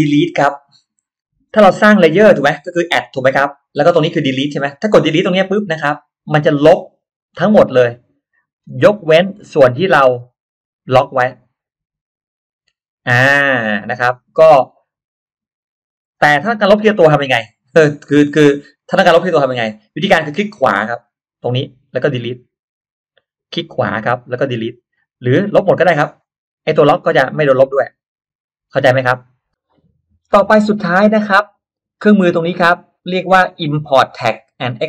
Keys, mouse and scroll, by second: 5.5 click, 9.0 click, 21.0 right click, 22.4 click, 23.3 right click, 24.4 click, 26.0 click, 27.8 click, 29.2 click.